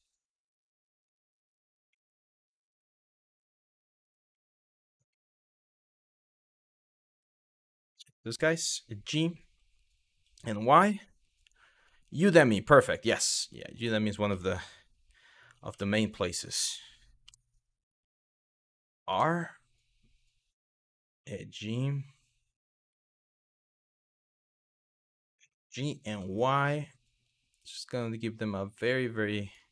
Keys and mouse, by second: 0.6 click, 1.6 middle click, 2.7-3.5 middle drag, 4.1 middle drag, 4.9 shift+middle drag, 7.6 middle drag, 8.2 middle click, 8.7 g, 10.1 y, 13.4 click, 14.0 middle click, 15.3 r, 16.9 KP_3, 17.8 shift+middle click, 18.7 r, 20.4 click, 20.8 g, 22.3 click, 22.6-23.9 middle drag, 25.1 g, 25.7 y, 29.1 click, 29.6 middle drag.